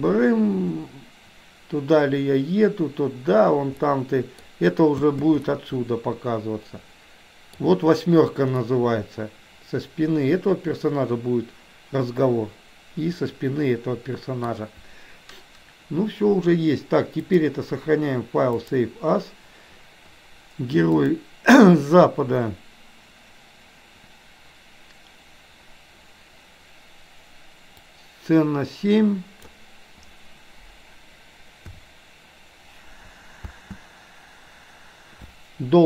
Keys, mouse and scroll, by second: 4.0 middle click, 5.1 space, 5.5-7.6 middle drag, 8.7-14.6 middle drag, 17.3-19.0 drag.